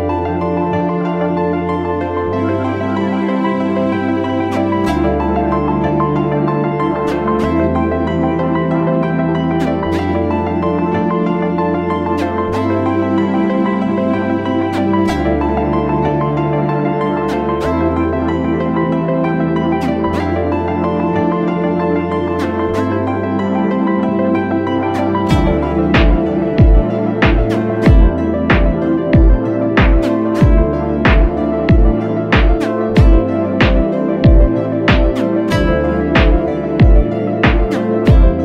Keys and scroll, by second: 2.5 space, 2.9 space, 3.0 space, 6.5 super+t, 25.2 super+=, 25.6 super+=, 26.7 space, 27.1 space, 27.2 space, 36.3 super+=, 36.6 super+=, 37.1 space, 37.5 space, 37.6 space.